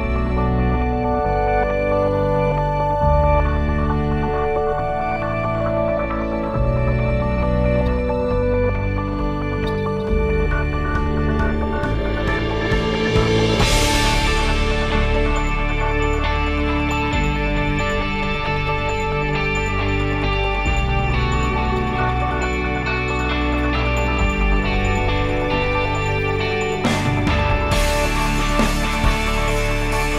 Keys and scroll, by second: 24.1 ctrl+s.